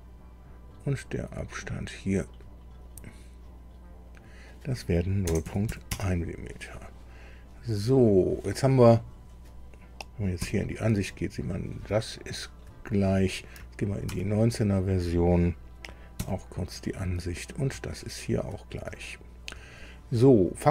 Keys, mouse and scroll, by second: 1.6 click, 2.9 click, 4.1 click, 5.2 KP_0, 5.4 KP_Decimal, 5.7 KP_1, 5.9 KP_Enter, 7.9 click, 10.4 KP_2, 11.9 shift+scroll up 1, 12.0 shift+middle click, 12.9 shift+scroll up 2, 14.2 alt+Tab, 16.2 KP_2, 17.1-17.5 scroll up 1, 17.8 shift+middle click, 18.9 shift+click.